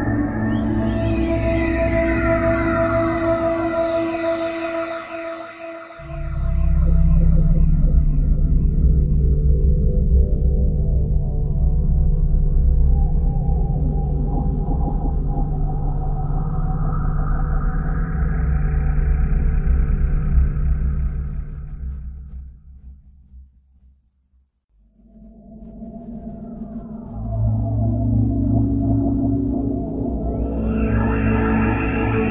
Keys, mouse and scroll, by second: 0.0 click, 4.0 click, 7.9 click, 31.0 Escape.